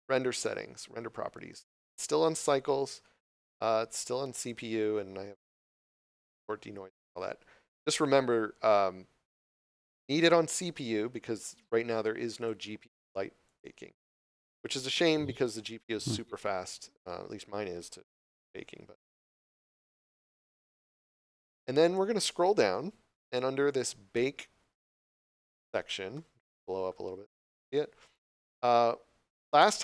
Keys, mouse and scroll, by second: 12.3 click, 19.7 click, 21.8 scroll down 1, 23.6 click, 27.3 scroll down 1.